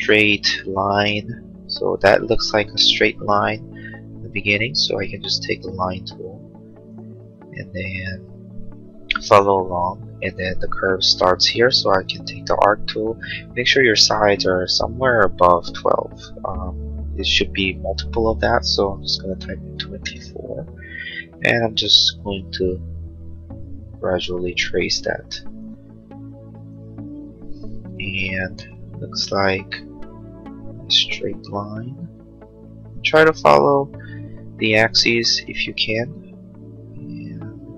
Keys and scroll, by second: 5.1 l, 11.6 a, 18.8 2, 19.2 4, 20.0 Return, 28.5 l, 34.8 a.